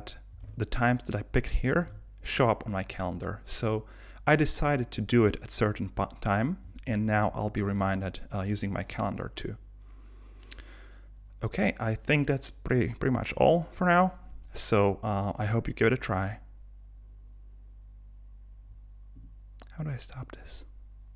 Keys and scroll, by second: 0.4 super+Tab, 1.9 super+Tab, 6.9 super+h.